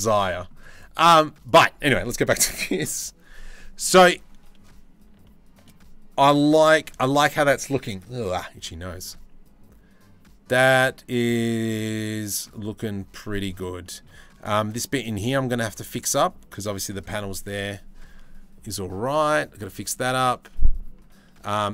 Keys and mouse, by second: 0.0 middle click, 4.9 shift+middle click, 11.0-12.1 drag, 13.4 shift+middle click, 18.8-19.3 drag.